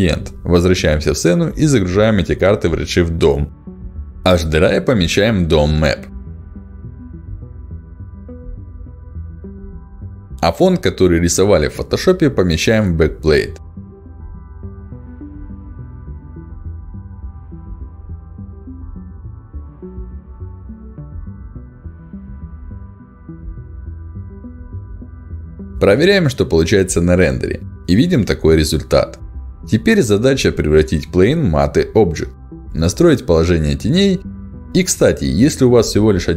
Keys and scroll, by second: 5.7 ctrl+alt+d, 16.2 ctrl+alt+d.